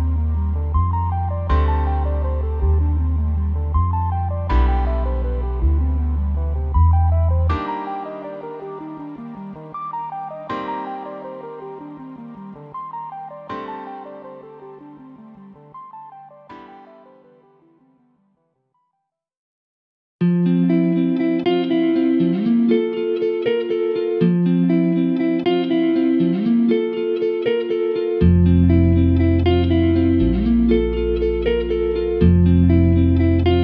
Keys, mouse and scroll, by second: 1.4 middle click, 1.8 middle click, 2.2 scroll down 1, 2.4-3.4 middle drag, 3.4 scroll up 2, 3.5 shift+middle click, 4.2-4.9 scroll down 2, 4.9-5.3 scroll down 1, 5.0 click, 5.3 click, 5.5 middle drag, 5.6 click, 8.5-8.9 middle drag, 9.1 middle click, 9.2 scroll up 2, 9.4-10.7 middle drag, 10.7-14.9 scroll down 2, 14.9-16.7 scroll down 1, 16.7 middle drag, 16.8-17.2 scroll up 1, 17.2-20.2 middle drag, 20.2 click, 20.3 Tab, 20.8 alt+click, 21.2 click, 21.7 scroll down 1, 21.7 Tab, 21.9 click, 22.0 middle drag, 22.1 scroll up 1, 22.3-33.1 middle drag, 33.1 click.